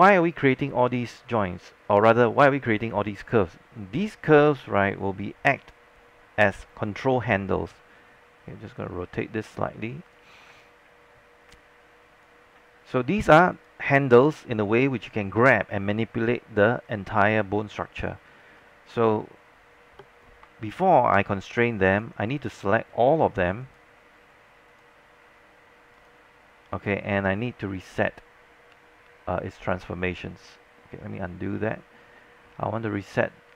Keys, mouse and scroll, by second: 4.8 click, 7.8 e, 8.9-12.4 drag, 12.8 alt+click, 22.0 shift+click, 23.7 shift+click, 24.8 shift+click, 28.2 click, 31.6 z.